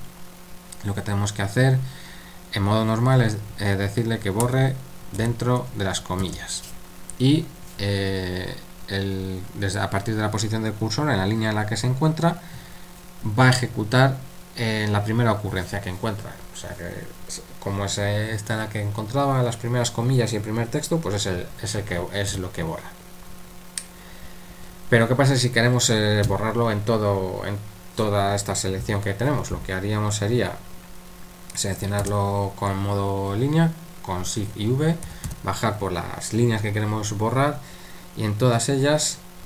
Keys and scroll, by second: 4.9-6.2 typing, 22.3 u, 32.0 shift+v, 35.0 typing.